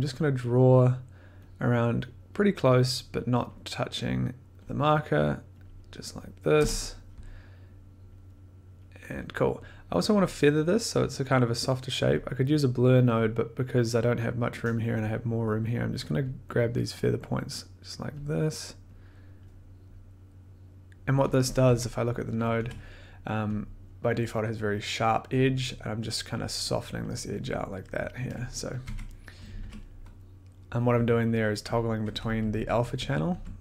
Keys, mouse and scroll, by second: 1.5 click, 2.4 click, 3.5 click, 3.9 scroll, 4.6 click, 5.6 click, 6.5 Return, 8.1 click, 9.2 click, 13.1 click, 16.5 click, 17.5 click, 18.2 click, 19.4 click, 20.6 click, 21.2 click, 21.6 click, 21.6-23.0 typing, 23.6 click, 23.6 middle click, 25.9 middle click, 28.8 click, 28.8-33.6 typing, 31.8 click.